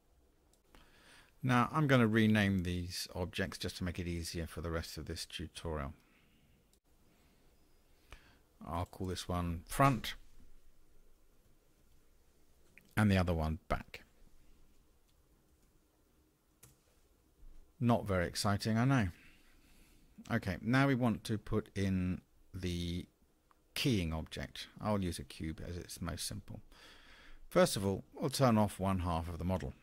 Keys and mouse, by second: 8.9-17.6 drag, 20.1-20.8 middle drag, 27.8 click.